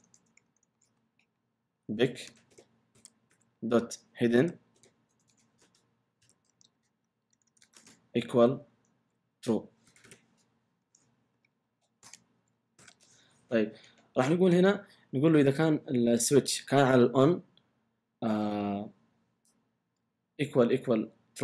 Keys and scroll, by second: 0.0-0.8 typing, 0.5 Return, 1.2 Up, 2.0-4.8 typing, 5.3 Return, 6.2-7.6 typing, 8.7-10.5 typing, 11.3 Up, 12.0 Return, 12.8 typing.